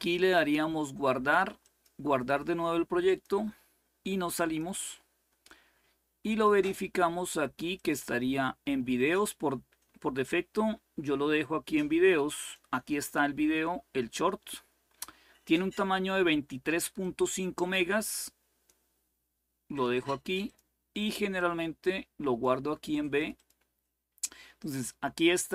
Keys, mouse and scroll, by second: 0.0 click, 1.3 click, 2.7 click, 4.1 click, 6.0 click, 7.4 click, 12.1 click, 16.7-19.0 drag, 19.4 click, 21.1-22.7 drag, 22.9 click.